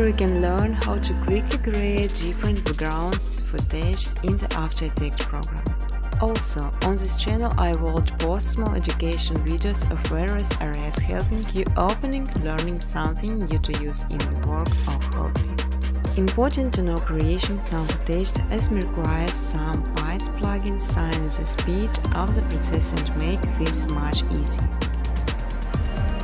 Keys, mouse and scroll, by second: 0.7 click, 1.3-6.3 typing, 7.8 click, 8.4-10.1 typing, 9.4 click, 10.7 click, 11.6 click, 11.9 click, 12.1 click, 12.4 click, 12.7 click, 13.0 click, 13.2 click, 13.4 click, 13.7 click, 15.1 click, 15.7 click, 16.1-17.1 scroll, 17.1 click, 17.1-18.6 scroll, 18.9 click, 19.4 click, 20.5 click, 20.5-20.8 scroll down 1, 21.1 scroll, 21.7-24.0 typing, 25.3 click, 26.0 click.